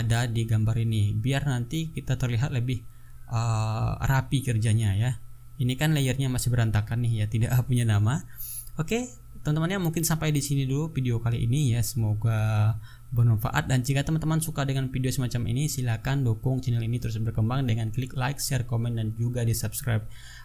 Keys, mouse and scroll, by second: 0.3 ctrl+click, 1.3 ctrl+click, 2.2 ctrl+click, 3.6 click, 6.4 click.